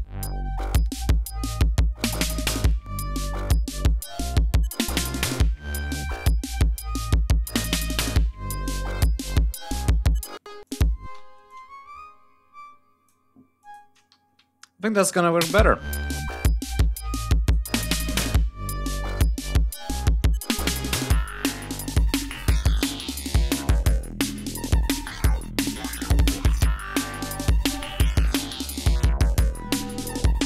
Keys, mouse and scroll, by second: 0.6 ctrl+scroll down 2, 1.9 g, 2.1 ctrl+scroll down 2, 3.1 ctrl+scroll up 3, 6.4 ctrl+scroll up 2, 9.8 ctrl+scroll up 2, 10.1 ctrl+space, 10.4 ctrl+click, 11.0 ctrl+e, 11.2-13.0 ctrl+drag, 13.4 click, 13.9 ctrl+scroll down 2, 15.0 click, 15.2 space, 17.2 ctrl+right click, 18.9 click, 21.9 ctrl+scroll down 2, 22.7 g, 22.9 click, 23.9 ctrl+shift+scroll up 2.